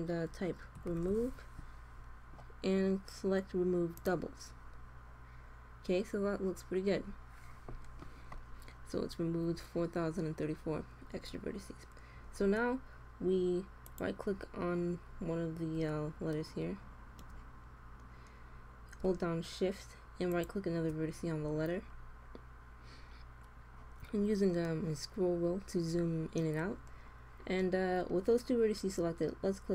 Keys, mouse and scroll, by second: 5.1-8.0 middle drag, 13.8-15.5 drag, 15.5-19.2 middle drag, 20.1-22.0 drag, 21.9 middle click, 22.1 click.